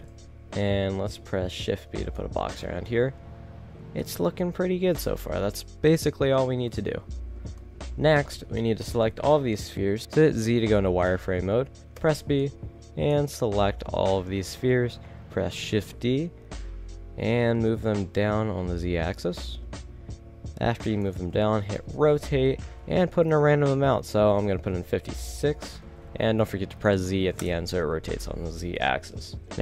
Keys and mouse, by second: 0.7 shift+b, 7.0 shift+z, 8.5 KP_1, 8.8 z, 10.0 z, 12.0 b, 12.9 click, 13.6 z, 15.7 shift+d, 20.4 click, 21.0-22.1 drag, 22.1 r, 26.9 click, 28.8 KP_7, 29.3 KP_0.